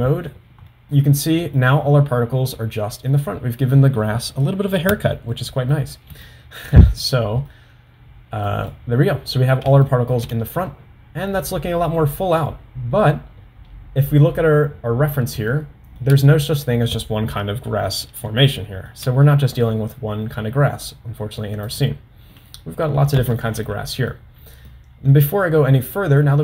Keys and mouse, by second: 0.9-1.6 middle drag, 2.7-3.2 middle drag, 5.4-5.9 middle drag, 6.4 shift+middle click, 7.1-7.6 middle drag, 8.7 middle click, 9.9 shift+middle drag, 15.6 shift+middle click, 18.7 shift+middle click, 23.8 middle click, 24.8-25.3 middle drag.